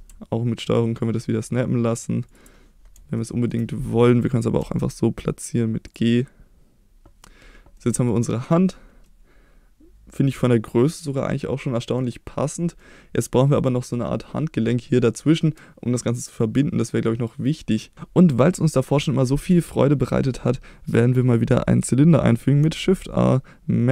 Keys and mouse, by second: 3.1-3.5 shift+middle drag, 4.6 g, 5.8 drag, 6.1-7.2 middle drag, 7.8-8.1 middle drag, 9.0-11.9 middle drag, 12.7-13.2 middle drag, 22.8 shift+a.